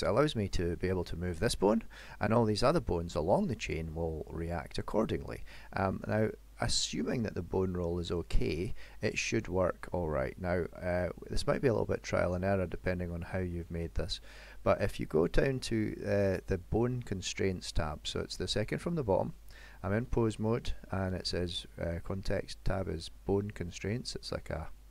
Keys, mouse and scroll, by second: 8.7 middle click, 10.3 middle click, 15.2 click.